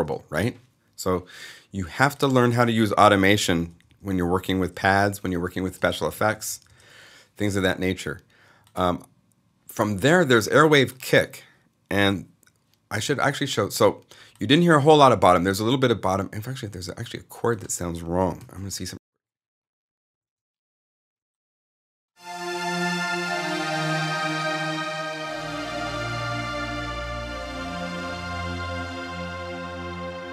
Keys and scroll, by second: 2.9 super+Up, 5.3 super+Left, 5.7 super+Up, 18.3 alt+s, 18.6 alt+0.